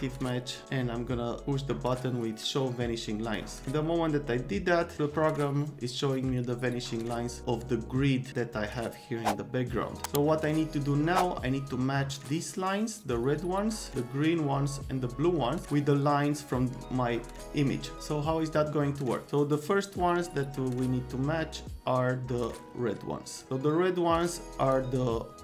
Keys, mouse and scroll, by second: 0.1 click, 3.2 click, 23.4-24.7 drag, 25.3 alt+click.